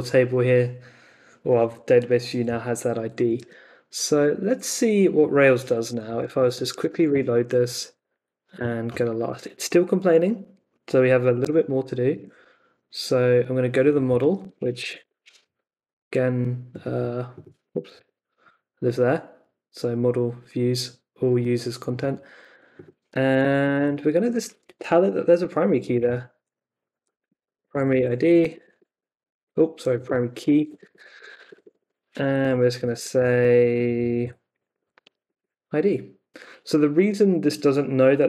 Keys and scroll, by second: 3.3 super+Tab, 5.6-7.3 typing, 7.6 Up, 8.5 Return, 11.4 super+Tab, 14.4 Escape, 14.5-15.5 typing, 17.9 n, 23.0 Escape, 23.3 o, 25.5-35.2 typing, 34.2 Left, 35.3 super+s.